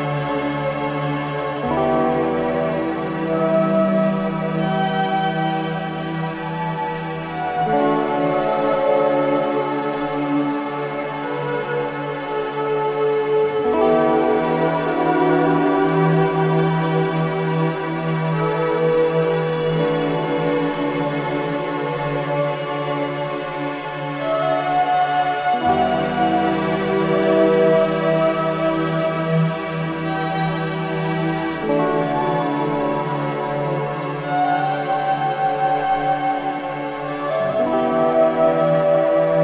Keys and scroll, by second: 2.7 ctrl+g, 3.3 c, 3.6 Escape, 9.9 F4, 12.8 ctrl+q, 15.1 F2, 15.9 g, 20.7 space, 21.1 F4, 21.8 Escape, 32.3 F2, 33.5 ctrl+k, 34.7 c, 35.2 Escape.